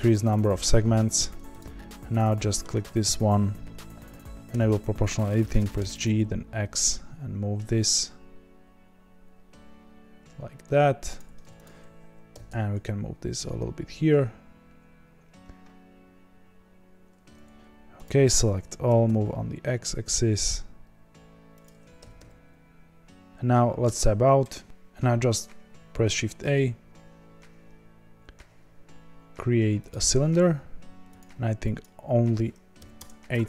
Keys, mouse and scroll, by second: 1.5 click, 1.9-4.4 middle drag, 4.4 o, 5.6 g, 11.6 click, 12.3 g, 18.2 a, 18.9 g, 21.9 g, 23.3 Tab, 23.8 Tab, 24.6 x, 32.9-33.4 drag.